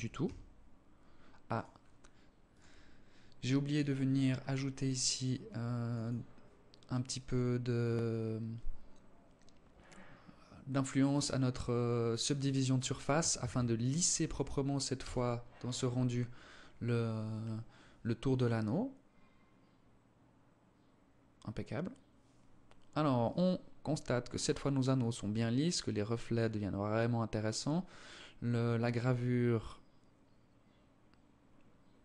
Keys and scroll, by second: 12.5 ctrl+s.